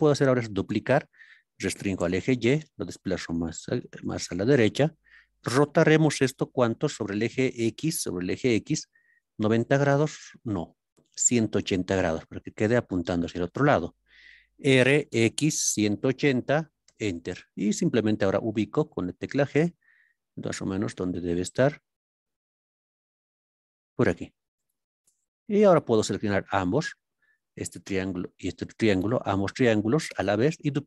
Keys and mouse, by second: 0.7 shift+d, 1.7 y, 4.1-15.1 drag, 15.1 x, 15.8 KP_1, 16.0 KP_8, 16.1 KP_0, 16.8 KP_Enter, 18.1 g, 24.6 click, 26.9 click.